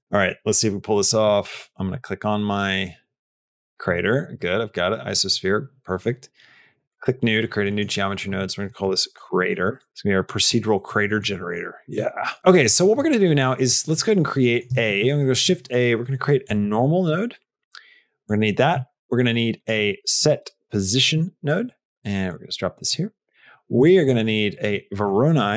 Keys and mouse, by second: 1.7 click, 3.3 click, 3.7 click, 5.8 middle click, 7.5 middle click, 8.0-9.9 drag, 10.1 click, 10.9 click, 11.3 middle click, 12.6 middle click, 22.7 middle click, 23.3 click.